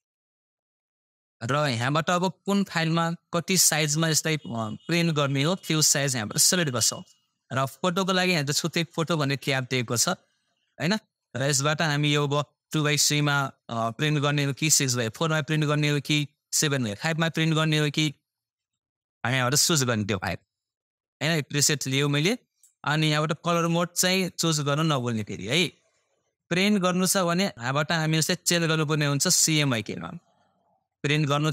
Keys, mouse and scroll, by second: 8.3 click, 19.2 click, 27.5 click.